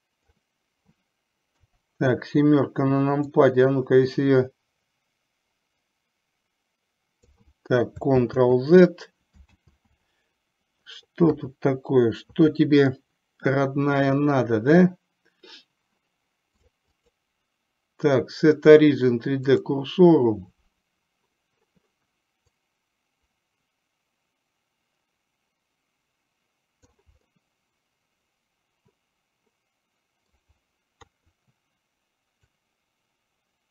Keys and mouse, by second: 1.6 KP_7, 3.4-7.5 drag, 8.3 ctrl+z, 11.5 KP_3, 16.8 drag, 17.1-19.8 drag, 22.8-27.0 drag, 27.4-30.4 middle drag, 31.1 KP_3, 32.8-33.7 drag.